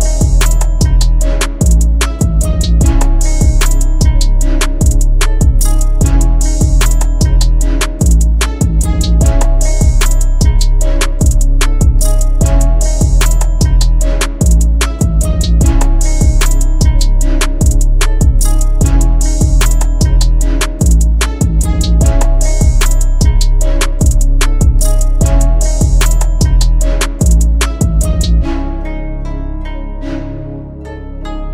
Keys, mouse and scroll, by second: 0.6 double click, 1.0 ], 5.5 double click, 9.9 ctrl+z, 28.0-29.2 typing.